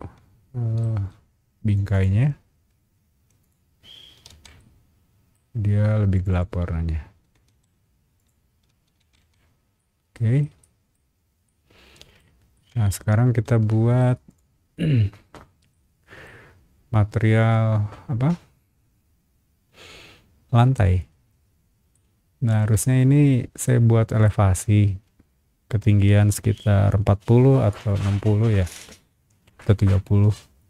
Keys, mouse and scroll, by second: 0.8 space, 1.7 click, 1.9 click, 3.2 b, 3.4 click, 3.9 space, 4.3 Escape, 4.6 middle click, 6.1 click, 6.3 click, 7.0-8.7 typing, 8.1 click, 9.0 Escape, 9.5 scroll down 1, 9.8 middle click, 10.6 middle click, 11.1 middle drag, 11.4 middle click, 12.5-14.0 shift+middle drag, 14.3 shift+click, 15.7 shift+middle click, 20.6 scroll down 1, 21.9 middle click, 23.6 middle click.